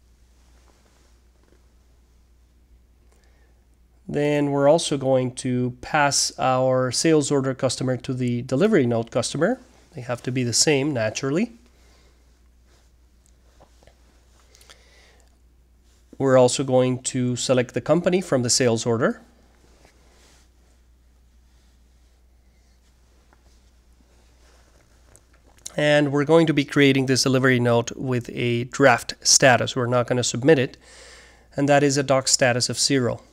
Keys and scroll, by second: 0.0-2.0 typing, 3.9-4.6 typing, 5.7-12.0 typing, 13.3-20.9 typing, 22.2-22.9 typing, 24.1-29.1 typing, 29.9 Return, 31.0-33.3 typing.